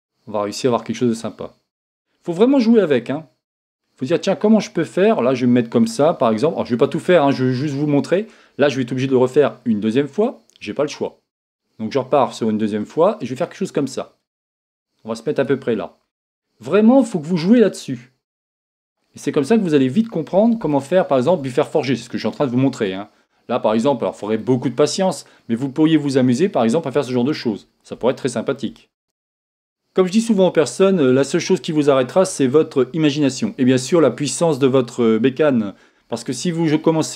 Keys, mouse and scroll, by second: 5.9 click, 6.1 scroll down 1, 6.5 scroll up 1, 11.1 scroll up 1, 11.1-15.6 drag, 16.9-18.9 drag, 20.7-37.1 shift+middle drag, 21.7 scroll down 1, 25.0 scroll up 2, 28.9 scroll up 2.